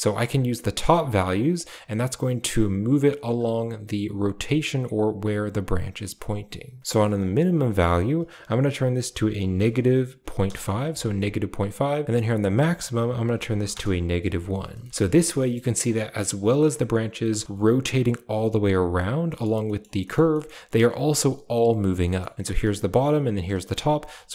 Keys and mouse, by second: 0.2-3.2 shift+drag, 6.9-10.3 drag, 12.0 click, 12.3-13.6 drag, 15.1 middle drag, 15.4 shift+middle click, 15.9 middle drag, 17.3 ctrl+space, 19.2 middle click, 19.5 middle drag, 19.9 middle click, 20.2-20.6 middle drag, 21.9 shift+middle drag, 22.3 a, 22.5 click, 23.6 a.